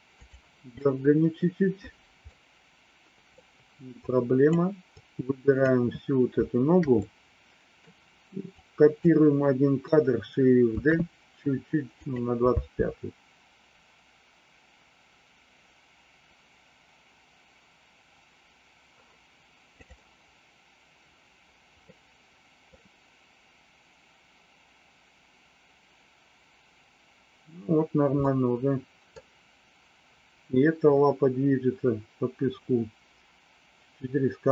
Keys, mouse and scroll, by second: 0.1 click, 0.8 middle click, 2.2-3.4 middle drag, 4.0 click, 4.9 click, 7.0 middle click, 8.6 click, 10.7 shift+d, 12.5 space, 19.8 click, 21.7 middle click, 28.2 middle click.